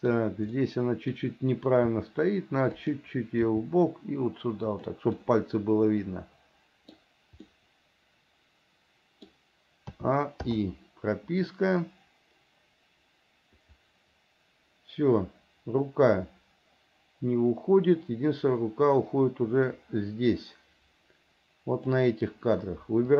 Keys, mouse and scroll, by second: 0.7 middle click, 2.1 r, 3.7 g, 5.4-7.2 middle drag, 7.7 scroll up 1, 7.8-9.5 middle drag, 9.5 scroll down 1, 10.2 a, 10.7 i, 11.7-22.2 drag.